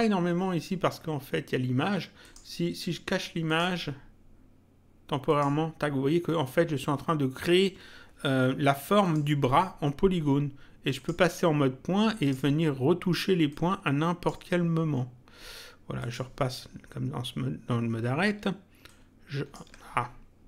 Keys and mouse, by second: 2.2 click, 3.4 click, 5.2 click, 9.0 click, 11.0 click, 12.2 click, 13.4 click, 16.0 click, 18.8 ctrl+click.